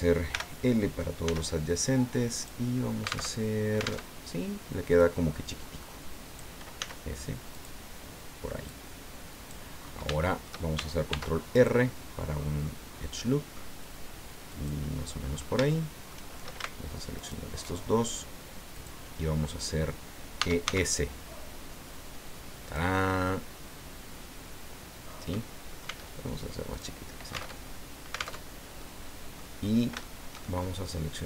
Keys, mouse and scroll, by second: 0.3 l, 1.3 s, 2.4 right click, 3.3 alt+Tab, 4.0 alt+Tab, 4.9-6.5 drag, 6.8 s, 7.5 click, 8.7-9.7 drag, 9.8-10.1 scroll up 3, 10.2 shift+middle click, 11.1 ctrl+r, 11.6 ctrl+click, 14.5 click, 15.2-15.6 scroll up 3, 15.6 shift+middle click, 17.2 alt+shift+right click, 18.8 click, 19.4-19.8 scroll down 2, 20.4 e, 20.7 s, 22.7 click, 23.0-25.5 middle drag, 25.8 s, 26.7 click, 27.5 alt+Tab, 28.4 alt+Tab, 28.8 alt+click, 29.6 scroll up 1, 30.0-31.2 shift+drag.